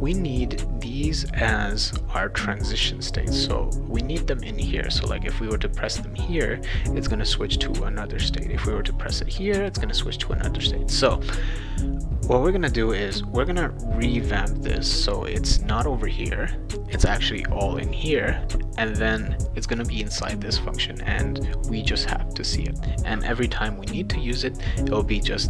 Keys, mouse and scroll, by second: 25.2-25.4 drag.